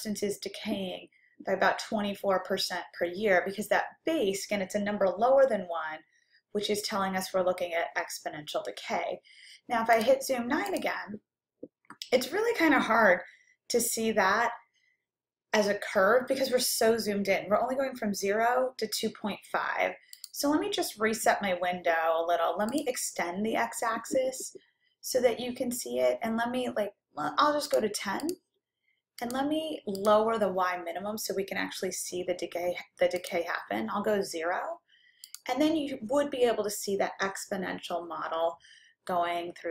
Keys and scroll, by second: 10.8 9, 22.7 Down, 27.7 1, 28.4 0, 29.2 Down, 30.1 Down, 33.3 0.